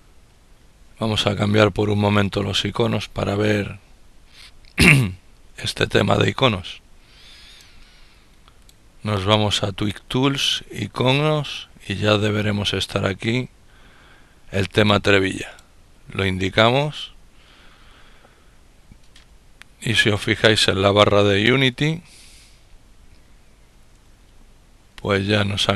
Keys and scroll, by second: 0.3 typing, 24.6 ctrl++, 25.3 ctrl++.